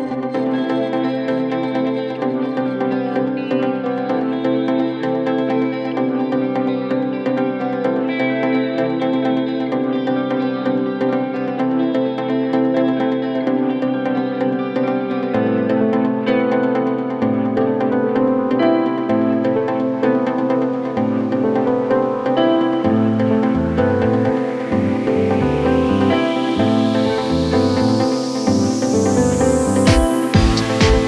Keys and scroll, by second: 17.9 r, 18.6 Up, 22.4 Up, 30.7 r.